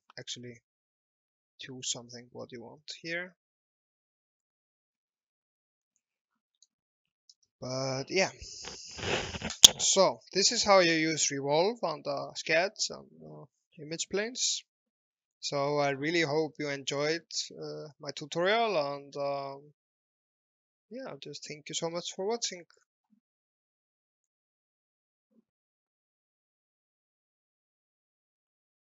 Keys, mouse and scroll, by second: 6.9 KP_3, 7.1 KP_6, 7.3 KP_0, 9.6 click, 10.5 alt+middle click, 11.2 shift+middle click, 15.3-16.1 shift+scroll up 2, 16.2 alt+middle click, 17.1 middle click, 21.4 scroll up 1, 22.1 middle click, 24.0 shift+middle click, 27.6 alt+Tab.